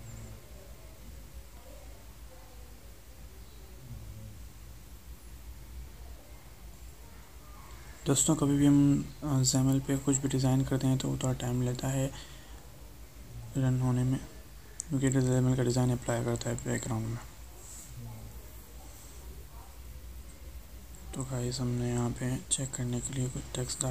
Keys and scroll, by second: 13.1 alt+Tab.